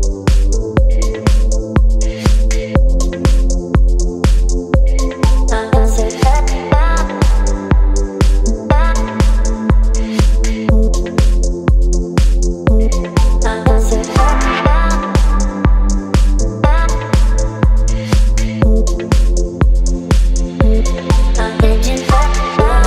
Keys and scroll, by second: 1.1 space, 6.8 space, 11.0 space, 12.6 space, 15.7 Delete, 16.6 Left, 16.7 Left, 16.7 Left, 17.1 Up, 17.2 Up, 17.3 Up, 17.4 Up, 17.6 Right, 19.3 space, 21.5 space.